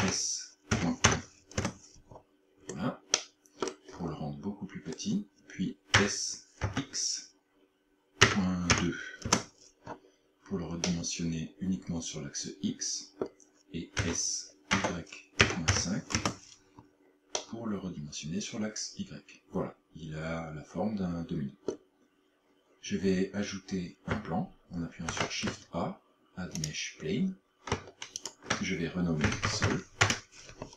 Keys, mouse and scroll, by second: 0.0 s, 2.6 scroll up 4, 3.2 middle click, 4.0-4.4 scroll up 2, 4.8 scroll up 2, 6.0 s, 10.8 middle click, 14.0 s, 17.4 middle click, 25.1 shift+a, 28.2 ctrl+click.